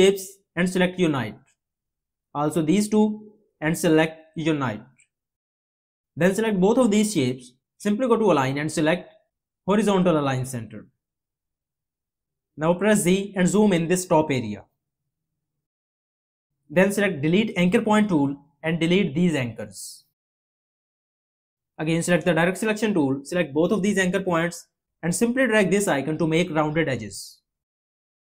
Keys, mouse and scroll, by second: 13.2 z.